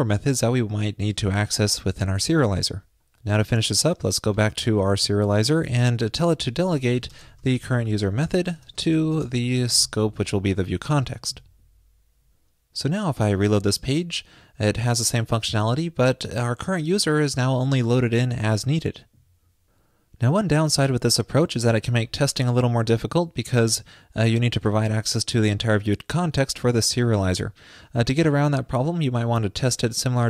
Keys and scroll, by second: 2.5 super+s, 11.4 super+s.